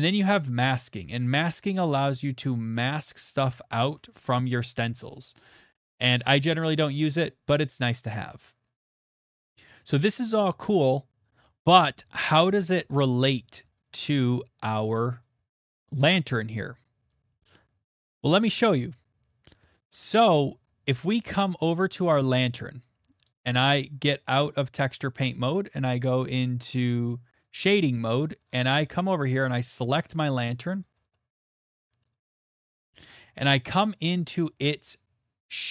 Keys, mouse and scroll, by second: 0.4 middle click, 1.0 right click, 1.0 middle click, 1.0 click, 1.6 click, 2.1 click, 9.1 click, 9.8 middle click, 10.6 middle click, 14.2 shift+middle click, 14.3 shift+middle click, 20.4 middle click, 20.5 middle click, 20.5 middle click, 20.5 middle click, 20.6 middle click, 22.4 middle click, 22.8 click, 23.5 right click, 25.7 scroll, 28.5 click, 28.5-28.8 scroll, 29.6 click, 30.2 middle click, 30.5 shift+middle click, 30.8 middle click, 30.8 middle click, 30.8 middle click, 31.1 middle click, 31.3 middle click, 31.3 middle click, 32.6 shift+middle click, 33.9 middle click, 34.6 shift+middle click, 35.2 middle click, 35.3-35.7 shift+middle click.